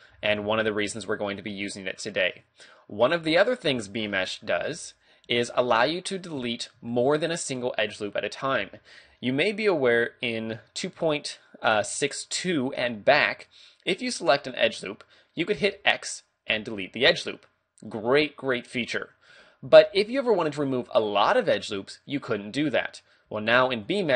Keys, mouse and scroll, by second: 0.1 j, 0.4 a, 0.5 scroll down 2, 0.9 middle click, 2.3 middle click, 4.5 ctrl+r, 5.1 right click, 5.3 a, 5.6 middle click, 6.4-6.7 scroll up 2, 6.9 shift+middle click, 10.0 shift+middle click, 10.6 middle click, 14.2 alt+right click, 15.6 x, 19.7 ctrl+z, 23.8 alt+shift+right click.